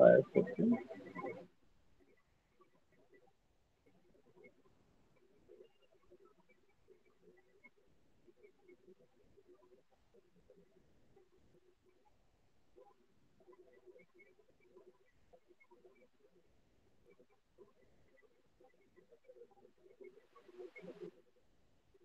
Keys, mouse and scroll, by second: 2.5 shift+click, 3.7 alt+middle click, 3.9 alt+click, 5.4 alt+middle click, 6.8 alt+click, 7.2 alt+middle click, 9.1 click, 10.3 shift+click, 11.5 click, 13.1 shift+click, 14.2 alt+middle click, 14.3 alt+click, 15.6 click, 17.5 shift+click, 18.9 alt+click, 20.1 alt+click, 20.9 alt+click, 21.3 shift+click.